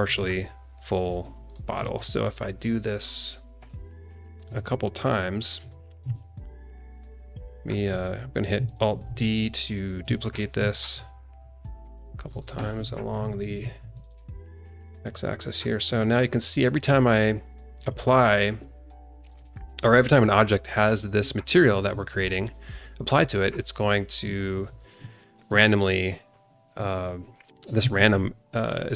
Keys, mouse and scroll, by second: 0.2-1.4 alt+middle drag, 1.4 scroll down 1, 1.9 alt+middle click, 3.1 click, 3.6 click, 4.2 scroll down 1, 4.5 middle click, 5.1 alt+middle click, 6.1-7.8 alt+middle drag, 8.9 alt+d, 10.7 alt+d, 12.3 scroll up 1, 12.5 shift+middle drag, 13.4 alt+d, 14.4 scroll down 1, 14.8-16.0 alt+middle drag, 16.0 scroll up 1, 16.3 click, 21.7-23.1 scroll down 1, 23.1 scroll down 1, 24.0 scroll down 1, 24.3 shift+middle click, 24.8 scroll down 1, 25.0 shift+middle click, 26.6 click, 27.5 click.